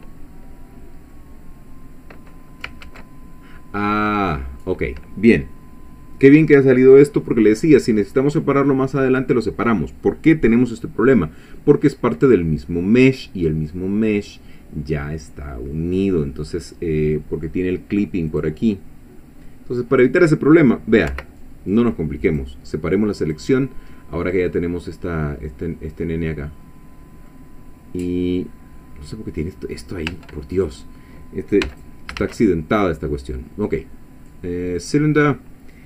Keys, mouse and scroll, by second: 1.1-2.5 middle drag, 2.9 ctrl+z, 18.3 click, 21.1 p, 22.3 click, 23.2 click, 24.0-27.5 middle drag, 30.1 Tab, 30.5 click, 31.6 x, 31.7 click, 32.2 shift+a, 34.8 click.